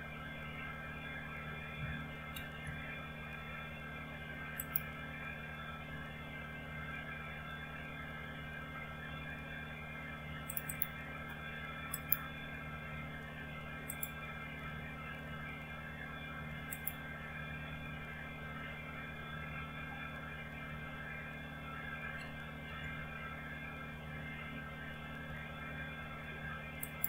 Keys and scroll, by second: 2.4 ctrl+c.